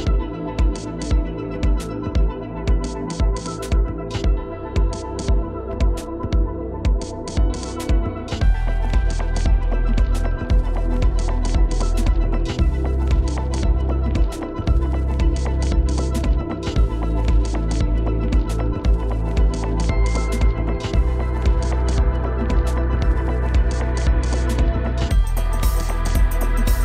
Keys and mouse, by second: 0.0 ], 2.3 ctrl+z, 3.4 ctrl+z, 3.5 ctrl+z, 3.7 ctrl+z, 3.7 [, 4.6 click, 5.6 ctrl+z, 5.8 ctrl+z, 6.0 ctrl+z, 7.0-8.8 drag, 8.8 ctrl+z, 9.1 ctrl+z, 10.1-12.0 drag, 12.1 ctrl+z, 12.8 ctrl+z, 14.3 ctrl+z, 18.6 ctrl+z, 18.6 [, 20.8 ], 25.5 ctrl+z, 25.7 ctrl+z, 25.9 ctrl+z.